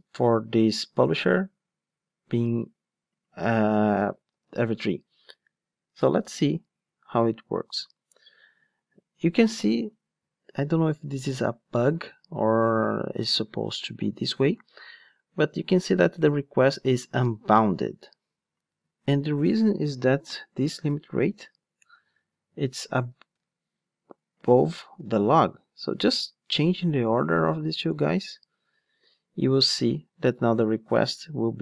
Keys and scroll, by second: 4.4 ctrl+shift+d, 21.8 alt+shift+Down.